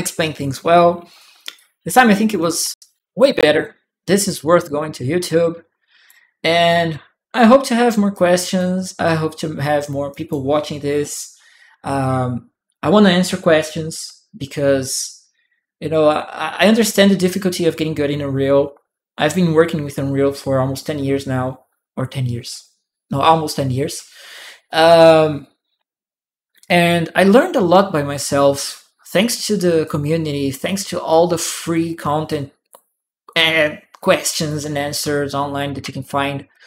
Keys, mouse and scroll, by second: 1.3 click, 3.0 click, 4.2-5.9 right drag, 7.9-10.1 right drag, 8.0 click, 8.8-9.9 drag, 29.6 click, 30.9-32.1 drag, 34.3-35.5 drag, 35.8 shift+click.